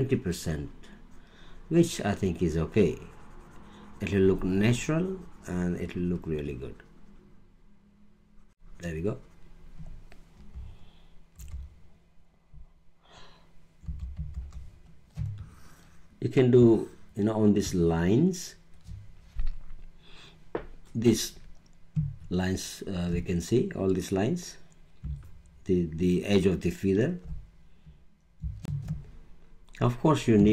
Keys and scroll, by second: 11.3 super+-, 13.8 super+=, 15.1 super+space, 28.6 alt+space.